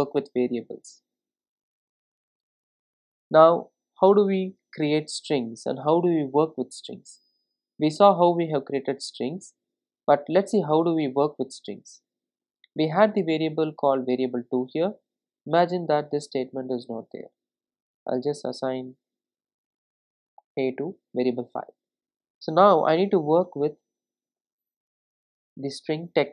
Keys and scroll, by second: 24.4 Return.